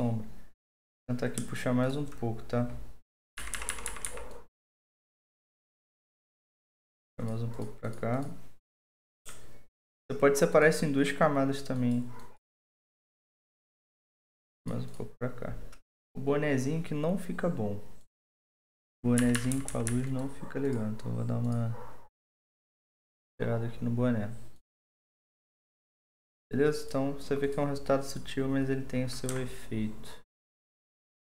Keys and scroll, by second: 3.4-4.4 typing, 19.3-20.2 typing.